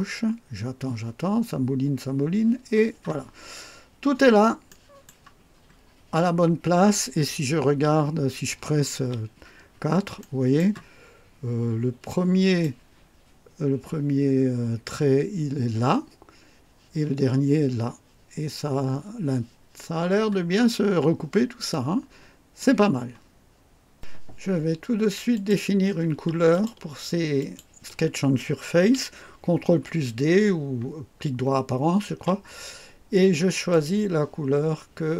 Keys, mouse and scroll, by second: 3.5-3.8 scroll up 1, 4.0 scroll down 1, 4.7 right click, 5.3-5.7 scroll down 2, 6.6 scroll up 2, 7.8 1, 9.7-10.0 scroll up 2, 10.2 right click, 11.0-11.5 scroll up 2, 12.1-12.8 right drag, 20.2-20.5 scroll down 2, 21.7 click, 25.3 click, 26.5 ctrl+click, 27.4 ctrl+click, 32.1 ctrl+d, 33.7 click.